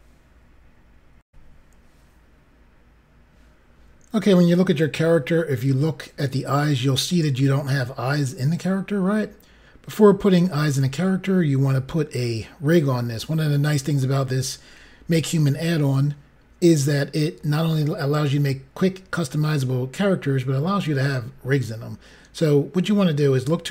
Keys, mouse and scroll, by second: 1.2 Pause, 2.3 Insert, 5.2 scroll up 3, 10.6 click, 13.6 scroll down 1.